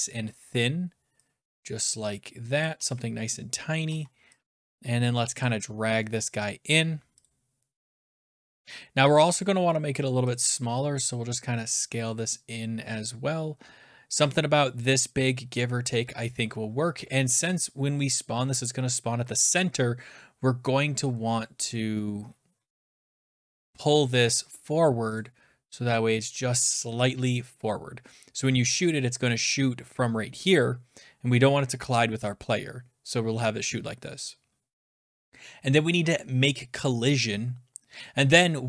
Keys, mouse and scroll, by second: 0.0-1.0 scroll, 2.6 click, 2.7 e, 3.8 w, 5.4 click, 7.2 click, 8.0 f, 10.3 click, 10.3 f, 14.8 click, 16.6-19.8 scroll down 11, 21.6-22.9 scroll, 25.2 click, 28.7 shift+click.